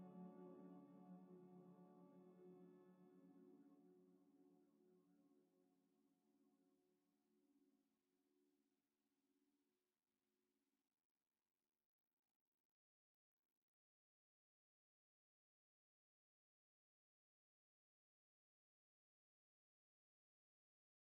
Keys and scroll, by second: 3.0 r, 4.8 a.